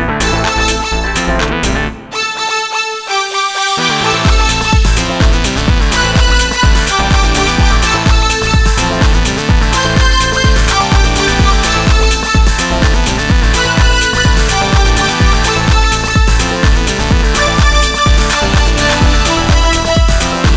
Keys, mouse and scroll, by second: 1.7 s, 8.0-11.3 middle drag, 11.3-20.5 drag.